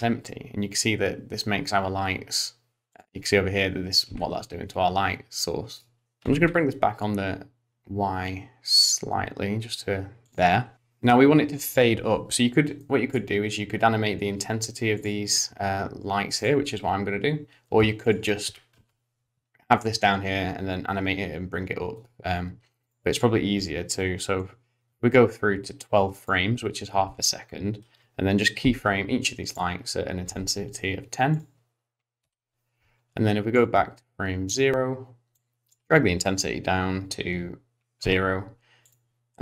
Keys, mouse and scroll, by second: 4.1 r, 6.0 middle click, 6.0 scroll down 1, 6.2 g, 10.7 click, 12.8 middle click, 15.0 click, 16.4 click, 18.0 click, 18.4 g, 22.8 click, 25.1 click, 28.6 i, 29.5 click, 30.2 i, 31.3 click, 32.2 i, 33.5 click, 35.4 click, 38.0 i, 38.9 click.